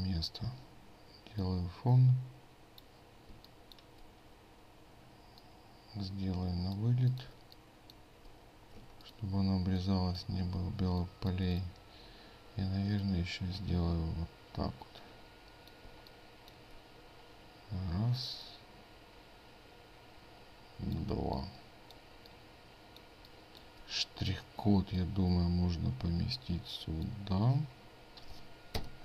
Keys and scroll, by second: 8.8 ctrl+space.